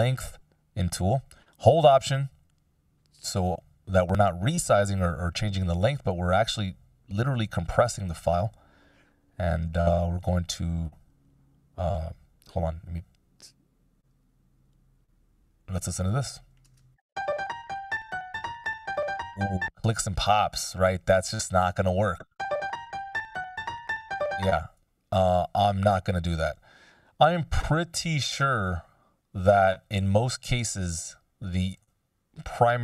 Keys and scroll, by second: 12.4 super+z, 16.5 shift+space, 19.4 space, 22.0 shift+space, 24.0 space.